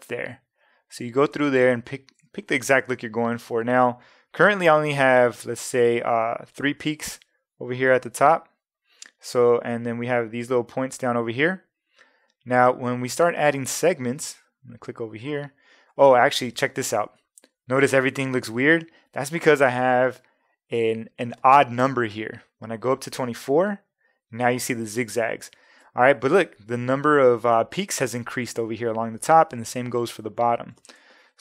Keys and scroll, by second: 0.0 Down, 1.6 Up, 23.3 Up.